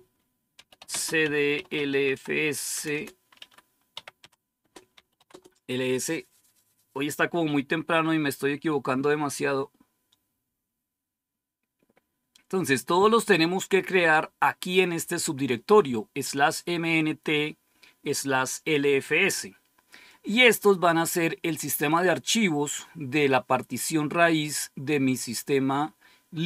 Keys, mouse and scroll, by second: 0.2-5.7 typing.